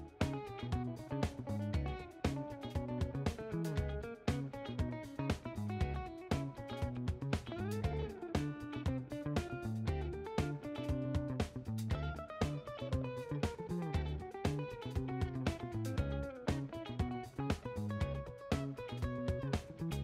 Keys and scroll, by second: 1.2 ctrl+h, 1.7 w, 2.0 f, 14.6-16.6 typing.